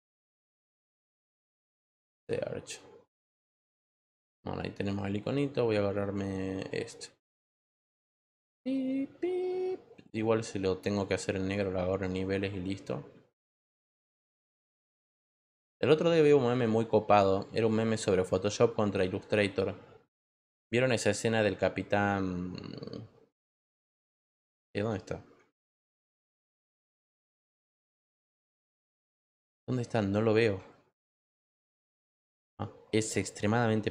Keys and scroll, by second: 0.0-1.4 typing, 1.5 Return, 25.6 ctrl+t, 31.0 ctrl+t.